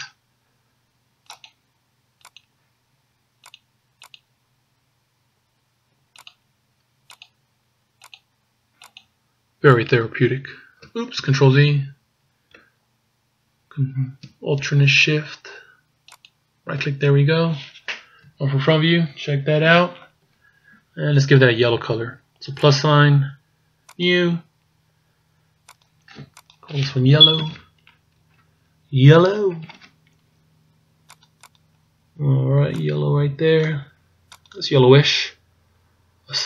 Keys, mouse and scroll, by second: 11.6 ctrl+z, 16.1 alt+shift+right click, 18.2 KP_1, 22.7 click, 23.9 click, 25.7 click, 26.5 click, 29.4 l, 31.6 click.